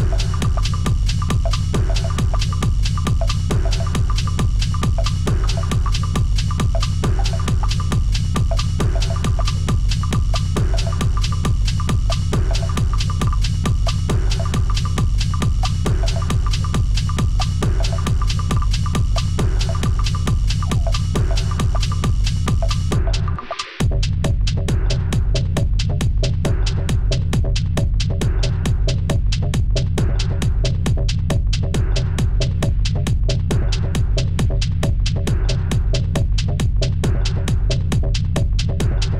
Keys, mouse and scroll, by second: 0.2 double click, 0.5 double click, 0.7 double click, 1.0 double click, 1.5-4.2 typing, 1.8 double click, 2.3 double click, 3.8 double click, 4.4 double click, 4.8 double click, 7.1 g, 8.3 Return, 12.1 double click, 12.9 Return, 15.0 alt+Tab, 15.4 Return, 16.0 Return, 16.6 double click, 18.2-18.7 alt+scroll up 4, 18.8 alt+scroll down 1, 19.6 double click, 19.9-20.4 alt+scroll down 2, 21.8 Delete, 22.2 b, 22.7-23.4 ], 24.4 x, 24.9 ], 25.1-25.6 double click, 25.2 double click, 25.4 double click, 26.1 double click, 26.3 ], 26.7-27.5 double click, 26.8 double click, 30.8 Return, 34.9 ctrl+shift+a.